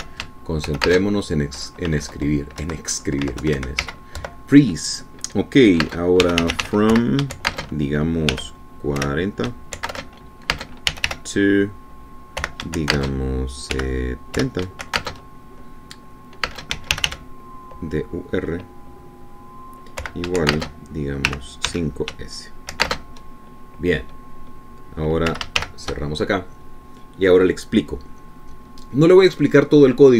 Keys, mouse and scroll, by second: 0.0-1.0 typing, 2.1 shift+space, 3.2 Left, 3.8 Right, 4.3 Left, 4.6 Right, 5.0 z, 5.4 End, 7.0-16.2 typing, 17.7-18.8 typing, 21.2 =, 21.7 shift+space, 22.5 5, 22.9 s, 24.0 shift+space, 26.5 /, 26.8 shift+..